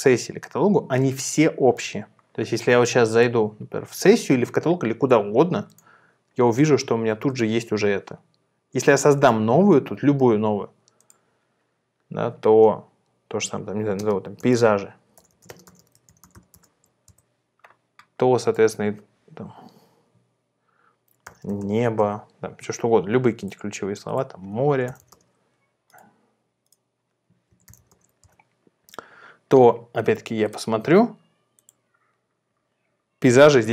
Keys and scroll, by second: 14.2-16.9 typing, 17.1 Return, 21.1-22.1 typing, 22.1 Return, 24.4-25.6 typing, 27.2-28.3 typing.